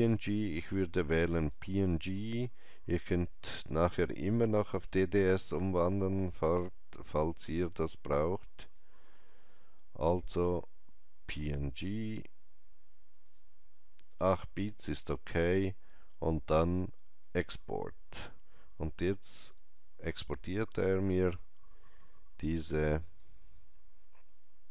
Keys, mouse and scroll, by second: 1.2 Return, 1.2 click, 5.2-11.0 drag, 13.1-15.8 drag, 17.1-19.7 drag, 22.9 click.